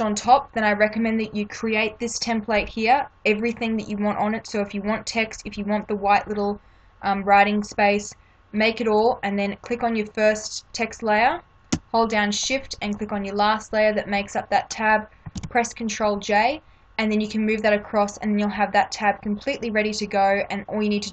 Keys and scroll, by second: 15.3 ctrl+j.